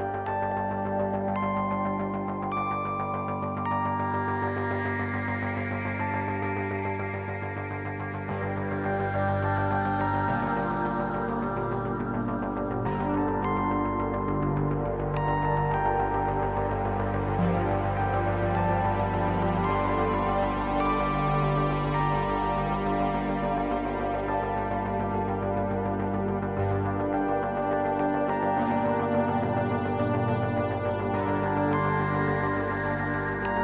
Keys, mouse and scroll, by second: 2.0 click, 3.2 click, 3.7 shift+a, 6.1 click, 9.8 click, 15.4-16.9 drag, 17.3-18.6 drag, 19.4 click, 24.6 click, 25.2 click, 26.3-28.4 drag, 32.0 shift+a.